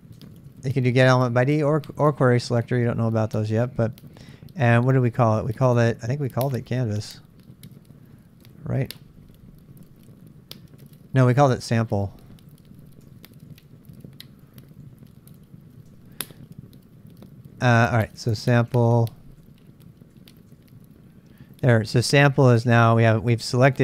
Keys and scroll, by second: 0.0-3.4 typing, 6.3-7.1 typing, 8.2-10.0 typing, 11.6-16.3 typing, 18.1-20.4 typing, 20.5 Return.